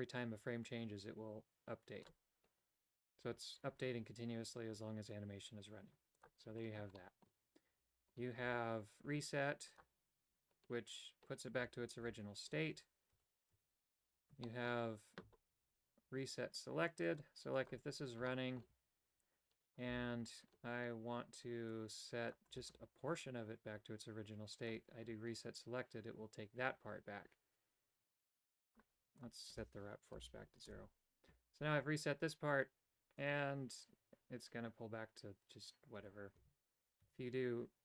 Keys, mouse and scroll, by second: 6.2 click, 7.0 shift+middle click, 8.4 Tab, 9.8 click, 12.0 a, 12.8 right click, 13.1 Tab, 13.5 Tab, 14.4 shift+middle click, 17.1 click, 17.5 click, 18.2 shift+middle click, 18.7 a, 19.8 c, 24.6 click, 24.7 typing, 29.2-31.2 drag, 33.2 click, 36.4 a, 37.1 a.